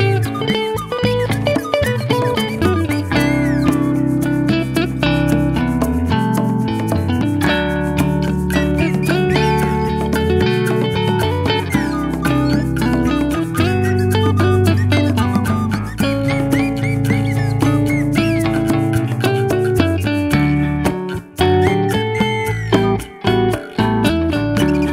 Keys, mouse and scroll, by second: 2.6 click, 3.9-5.3 shift+middle drag, 7.3 click, 8.2 click, 9.5 shift+d, 10.5 y, 14.4 click, 15.7 click, 16.5 click, 17.6 click, 19.2 click, 20.0 click.